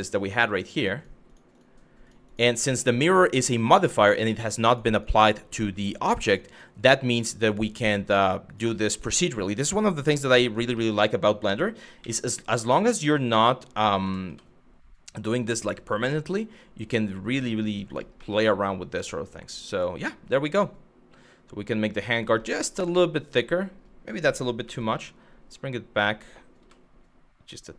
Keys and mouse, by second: 0.6 click, 1.2 click, 1.9 click, 2.3 click, 2.7 shift+click, 3.4 shift+click, 3.7 shift+click, 4.6 shift+click, 6.1 shift+click, 6.4 shift+click, 6.7 shift+click, 7.1 shift+click, 7.7 shift+click, 8.7 shift+click, 8.9 shift+click, 9.6 shift+click, 9.9 shift+click, 10.5 middle click, 11.3 g, 11.6 x, 17.5 click, 17.9-21.4 middle drag, 21.7 middle click, 22.6 middle click, 24.3 g, 24.5 x.